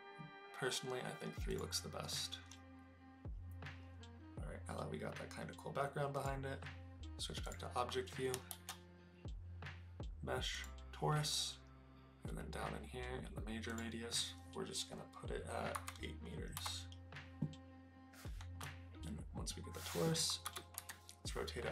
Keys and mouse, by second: 6.1 click, 8.4 shift+a, 13.6-16.9 drag, 18.5 KP_Decimal, 20.4 r, 20.8 x.